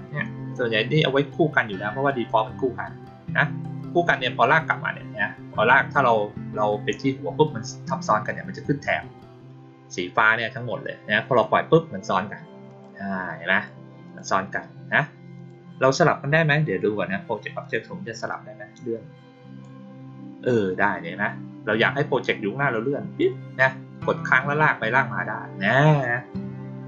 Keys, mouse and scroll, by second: 0.2-11.3 drag, 12.6 click, 13.5 click, 14.0 click, 15.3 click, 17.6 click, 18.2-19.6 drag, 22.2-23.1 drag.